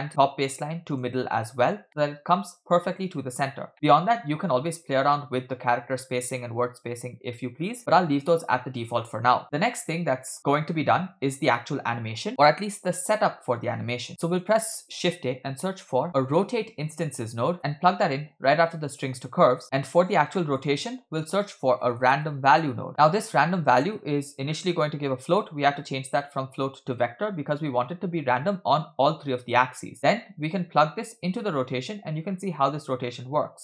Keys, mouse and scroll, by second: 1.9-2.4 middle drag, 3.7 middle click, 4.0-4.9 scroll up 1, 4.9-6.2 scroll up 2, 9.3-10.3 scroll down 4, 10.3 middle click, 10.9-11.3 drag, 14.1 shift+a, 17.1 BackSpace, 17.2 BackSpace, 19.2 click, 19.6 middle click, 19.6 scroll down 2, 20.4 middle click, 20.8 shift+a, 24.0-24.5 scroll up 1, 24.5-25.4 scroll up 4, 24.5 middle click, 25.4-27.1 drag, 27.8 click, 30.0 middle click, 30.8-31.5 drag, 32.3-32.6 scroll up 3.